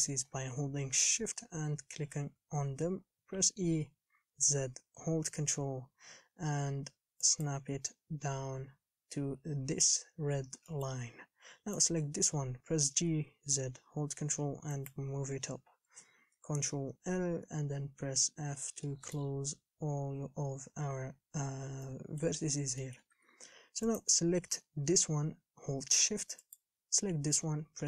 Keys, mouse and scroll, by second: 0.5-3.6 scroll down 1, 3.6 e, 10.9 shift+middle click, 11.3 scroll up 4, 12.1 click, 13.0 g, 15.7-16.5 scroll down 5, 16.5 ctrl+l, 18.2 f, 19.1-21.7 shift+middle drag, 21.7-22.1 scroll up 4, 22.1 shift+middle click, 22.7 scroll up 3, 23.0 shift+middle click, 23.3 a, 24.2 click, 26.8 shift+click.